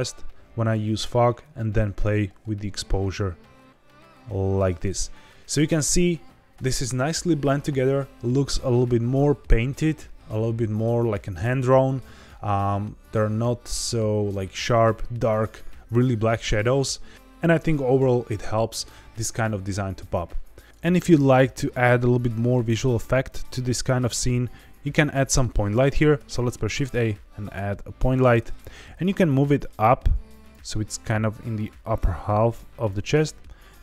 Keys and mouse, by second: 1.4-4.6 drag, 23.5 z, 24.7 shift+a, 26.1 shift+a, 26.6 shift+a, 28.8 g, 28.8 z, 30.4 click, 30.6-31.3 middle drag, 32.0 g, 32.1 z, 32.7 click, 33.6 click.